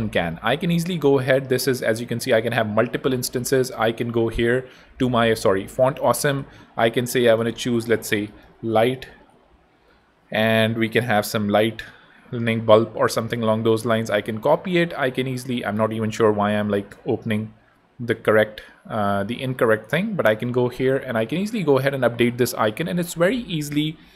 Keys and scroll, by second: 1.8 super+d, 4.1 super+Tab, 5.3 super+2, 7.9-9.8 typing, 9.9 Return, 14.2 super+Tab, 21.0 super+v, 21.6 super+Tab, 22.1 Tab.